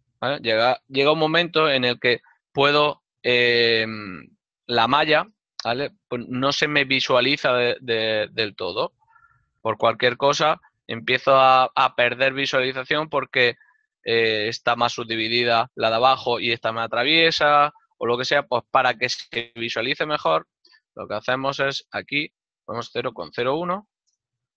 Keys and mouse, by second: 7.4 right click, 8.3 shift+middle click, 8.9 alt+right click, 9.1 e, 12.2 shift+middle click, 14.9 click, 19.4 shift+middle click, 21.5 n, 22.7 KP_0, 24.3 Return, 24.3 KP_Enter.